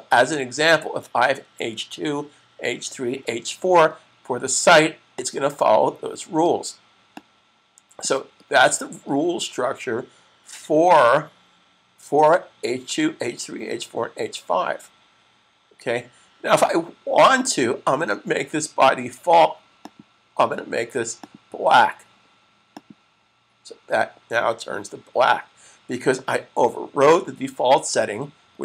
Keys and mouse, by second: 5.0 click, 19.5 click.